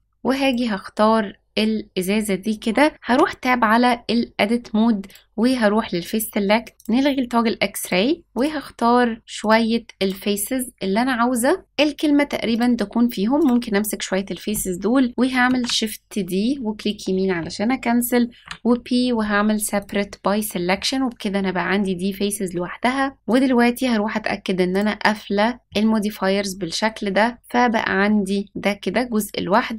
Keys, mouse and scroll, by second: 0.3 click, 1.1-1.9 scroll up 3, 3.0 Tab, 5.0 click, 6.7 shift+click, 7.7 click, 8.2 shift+click, 9.3 shift+click, 9.9 shift+click, 12.4 shift+click, 13.3 shift+click, 15.6 shift+d, 18.3 p, 20.4 s, 23.2 click, 24.6 click, 25.6 click, 27.4 click, 27.9-28.5 middle drag, 29.0 click, 29.7 click.